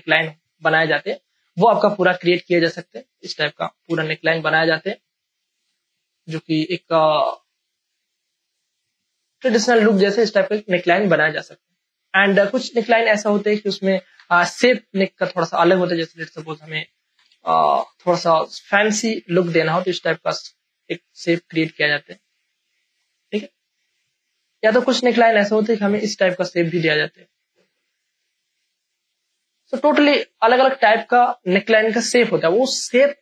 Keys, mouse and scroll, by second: 2.1 a, 3.3 alt+click, 4.3 ctrl+t, 4.5 ctrl+right click, 5.5-9.7 drag, 7.6 shift+click, 9.7 Return, 12.6 ctrl+alt+z, 14.1 Delete, 15.4 p, 16.0 click, 17.1 Delete, 17.8-33.2 drag.